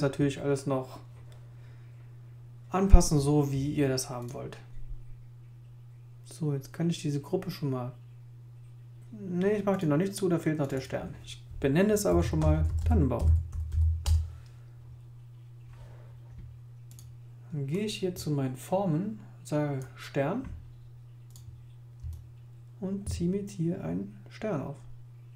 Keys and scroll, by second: 11.8-14.2 typing.